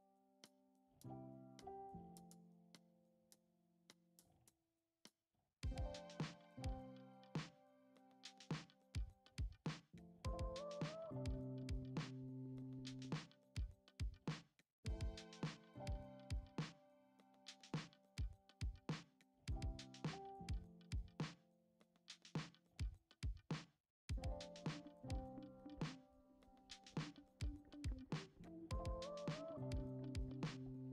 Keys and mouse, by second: 1.2 alt+z, 2.4 ctrl+a, 3.7 ctrl+Tab, 4.8-5.3 drag, 7.1 click, 7.9 middle click, 8.5 g, 12.4 click, 13.7-14.6 middle drag, 14.8 g, 15.2 middle click, 16.0 click, 16.3-16.6 shift+middle drag, 16.9 middle click, 17.5 shift+c, 18.4 click, 20.8 shift+middle click, 21.2 Tab, 22.4 click, 22.7 middle click, 23.4 shift+middle click, 23.9 middle click, 24.8 click, 25.6 shift+d, 26.3 p, 26.9 Tab, 27.3 click, 28.4 click, 28.8 click, 29.2 Tab, 29.7 a, 30.1 s.